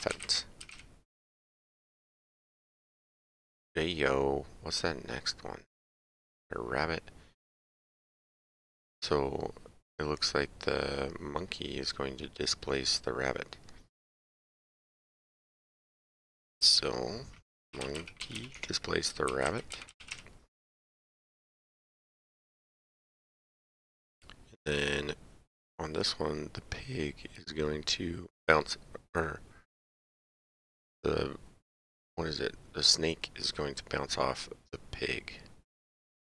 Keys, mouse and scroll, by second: 0.1 p, 2.0 click, 16.0 click, 16.9-17.9 typing, 18.5 Tab, 19.3 r, 19.5 a, 19.7 b, 22.0 click.